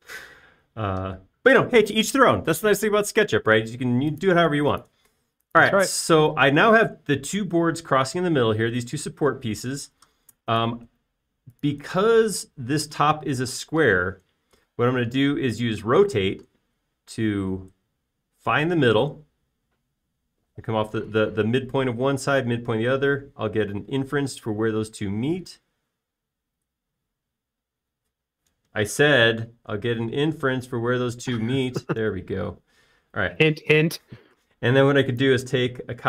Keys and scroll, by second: 16.9 q.